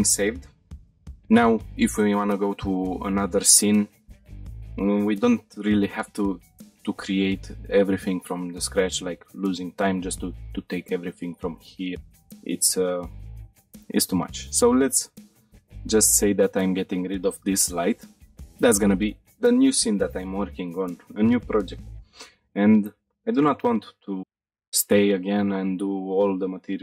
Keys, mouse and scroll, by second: 13.6 scroll down 1, 13.9 shift+middle click, 14.9 click, 15.4 click, 16.2 Delete, 17.5 shift+middle drag, 17.9-18.2 middle drag, 18.3 shift+middle drag.